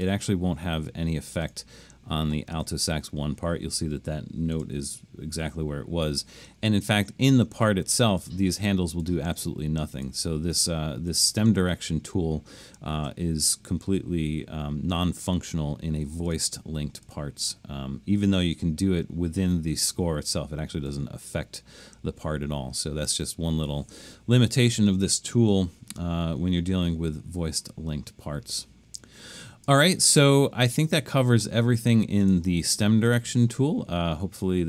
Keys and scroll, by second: 4.7 super+-, 29.8 super+-, 30.4 super+-.